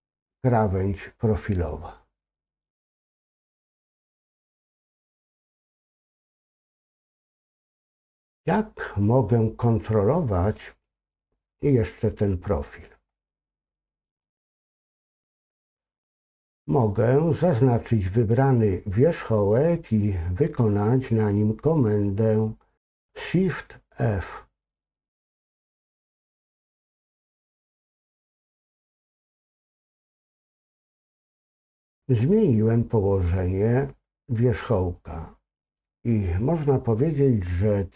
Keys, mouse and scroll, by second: 4.0-9.2 scroll down 2, 9.2-14.2 scroll down 1, 14.2 click, 25.0 click.